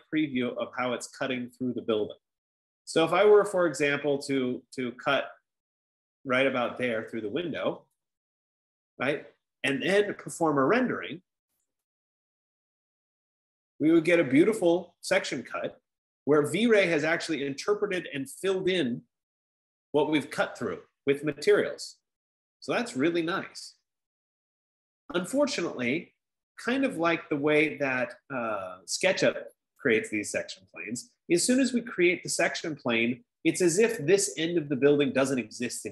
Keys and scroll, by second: 9.0 F15.